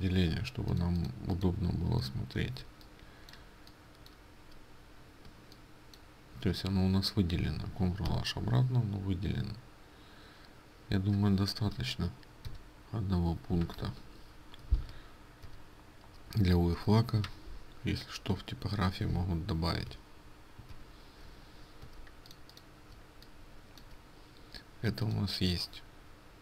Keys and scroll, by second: 0.2 ctrl+space, 0.2 ctrl+h, 8.2 ctrl+h, 12.6 ctrl+i, 14.1 Escape, 16.6 Escape, 16.6 ctrl+i.